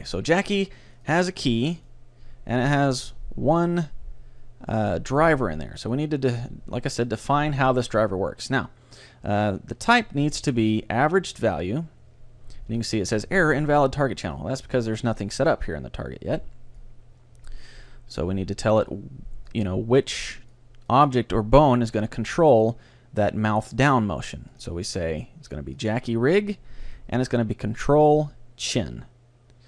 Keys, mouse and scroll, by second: 1.0-4.7 drag, 10.3-12.2 drag, 16.8-18.6 drag, 18.9-22.4 drag, 26.0 click, 26.9-28.8 drag.